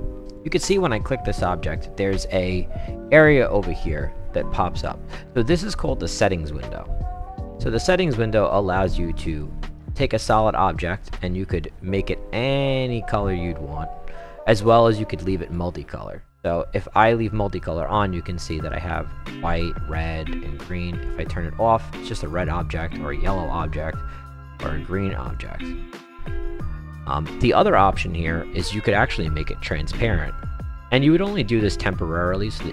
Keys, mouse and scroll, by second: 0.3 click, 0.7 click, 9.3 click, 15.4 click, 16.3 click, 21.0 click, 22.3 click, 23.9 click, 24.5 click, 25.3 click, 29.4 click, 30.4 click, 30.9-32.7 right drag.